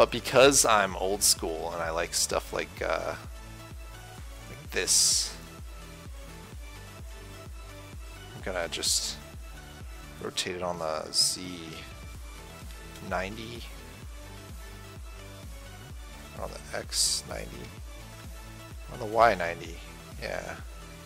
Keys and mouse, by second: 0.4-2.4 drag, 1.1 shift+a, 5.7-10.4 drag, 10.4 r.